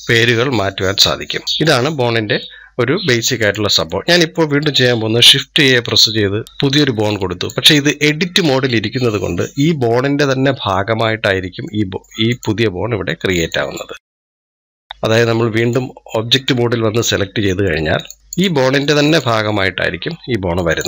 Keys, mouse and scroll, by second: 0.5-1.8 middle drag, 1.8-2.2 scroll down 1, 2.2 middle click, 3.2 click, 3.7-5.5 middle drag, 5.5 shift+a, 6.4 click, 8.5-10.5 middle drag, 10.5 scroll up 3, 11.1 scroll down 2, 11.5 middle click, 12.1-13.2 drag, 13.3 click, 14.6 click, 17.5 middle click, 17.9-19.2 drag.